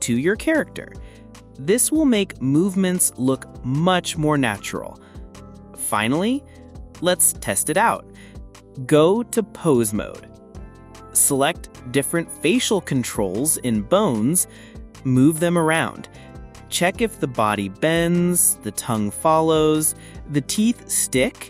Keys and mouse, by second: 0.9-1.8 drag, 11.9 r, 12.6 x, 16.6 click, 16.9 s, 17.4 click, 17.9 click, 18.0 click, 18.2 g, 19.2 click, 19.4 click, 19.6 click, 20.9 click, 21.2 t.